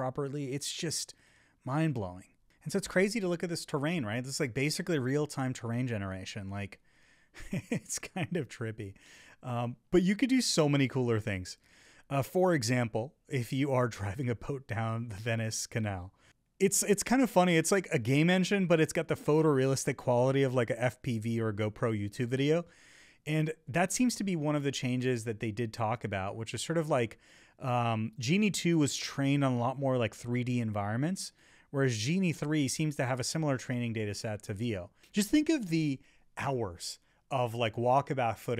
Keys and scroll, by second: 3.6 Left, 4.6 Right, 5.9 Left, 9.6 Right, 10.8 Left, 12.9 Up, 14.5 Left, 16.1 Right, 16.9 Right, 18.5 Left, 20.0 Up, 35.4 Up, 38.0 Up.